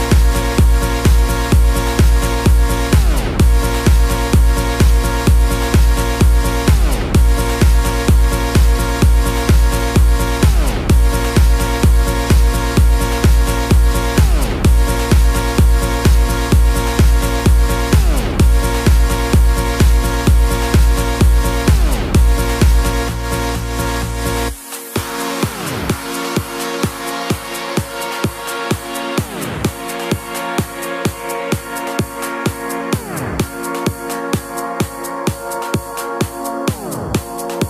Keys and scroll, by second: 0.1 x, 26.8 super+z, 27.3 super+z, 28.0 super+z.